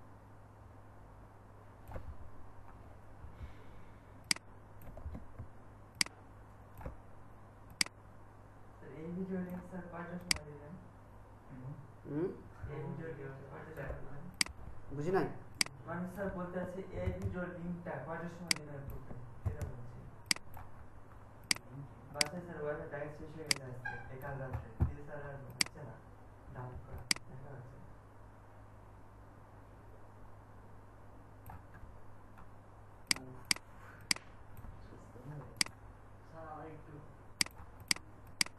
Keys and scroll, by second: 17.0 ctrl+g, 19.4 ctrl+g.